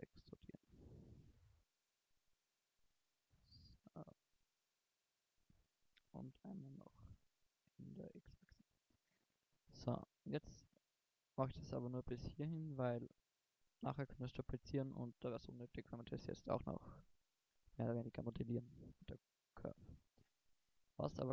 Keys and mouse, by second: 0.2-1.8 drag, 6.0 e, 8.4 click, 10.2 middle click, 16.2 middle click, 18.1 middle click, 20.1 middle click, 20.3 middle click, 20.9 right click.